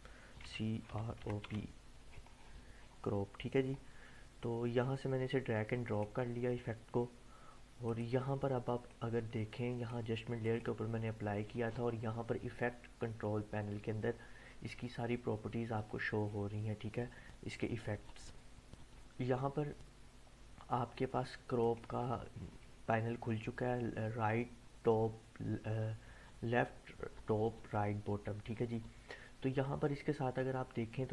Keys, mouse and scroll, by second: 0.4-1.9 typing, 3.0-4.4 scroll down 1, 4.4-6.3 drag, 21.6 click.